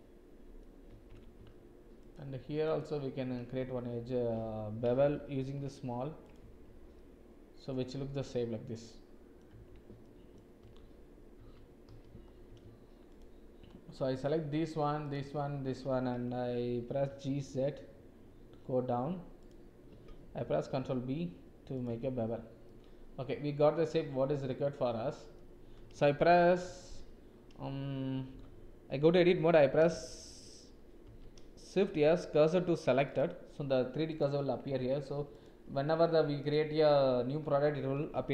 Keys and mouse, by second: 1.0 Tab, 2.7 alt+click, 3.5 ctrl+v, 5.4 ctrl+b, 6.6 Tab, 6.9-9.4 drag, 9.5 Tab, 10.0 ctrl+click, 10.7 ctrl+z, 14.2 alt+shift+click, 15.0 alt+shift+click, 17.0 g, 20.4 ctrl+b, 22.1 Tab, 22.6 click, 23.6 middle click, 24.4 middle click, 26.6 Tab, 31.0 shift+s, 34.1 click, 34.8 Tab, 36.3 click.